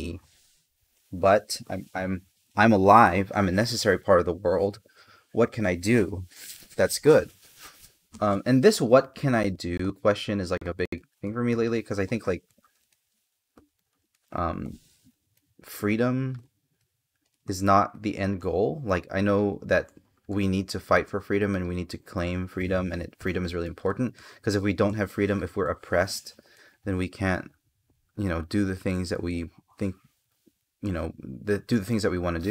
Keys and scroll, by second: 12.1 space, 14.4 space, 19.1 space, 22.9 space, 26.2 space, 30.5 space.